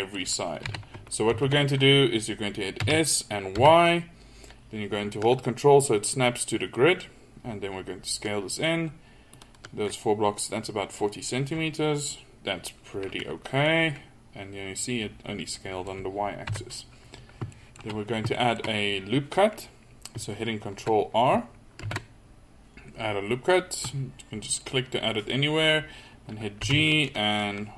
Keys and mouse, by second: 0.8 KP_3, 1.4 ctrl+z, 2.9 s, 13.1-15.7 middle drag, 16.5 KP_3, 21.9 ctrl+r.